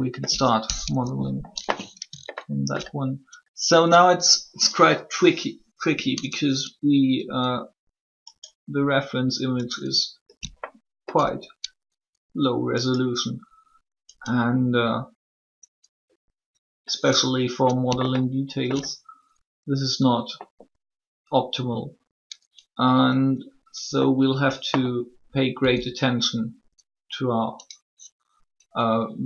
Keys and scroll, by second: 0.6 shift+3, 25.3 e.